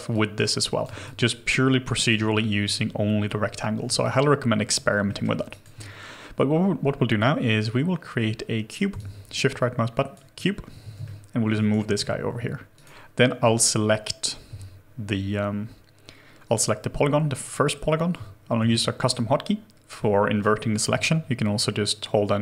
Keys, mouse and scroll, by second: 1.0 alt+click, 4.0 alt+click, 5.1 alt+middle click, 5.5 alt+right click, 9.0 shift+right click, 10.7 w, 11.0 shift+middle click, 11.8 alt+middle click, 18.6 alt+2, 21.0 shift+click.